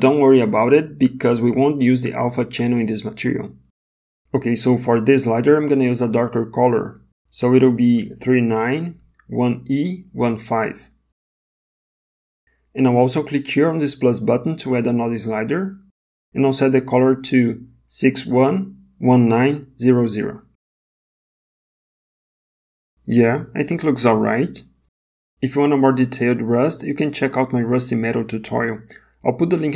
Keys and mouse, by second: 5.0 click, 5.3 click, 6.2 click, 14.5 click, 19.1 KP_0, 28.3 middle click, 29.5 click.